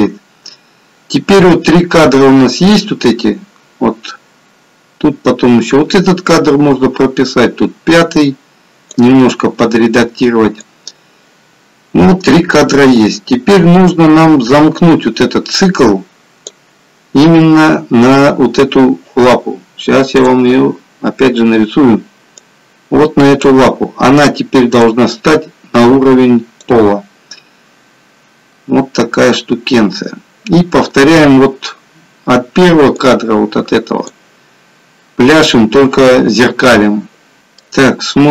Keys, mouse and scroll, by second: 10.8 click, 37.4 middle click.